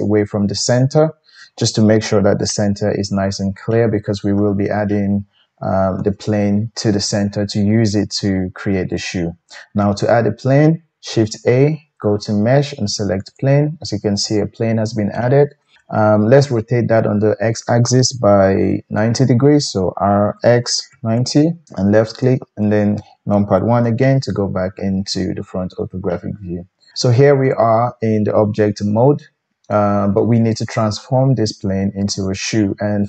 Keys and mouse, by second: 0.0-8.5 middle drag, 11.3 shift+a, 14.5-33.0 middle drag, 19.9 r, 22.2 KP_1.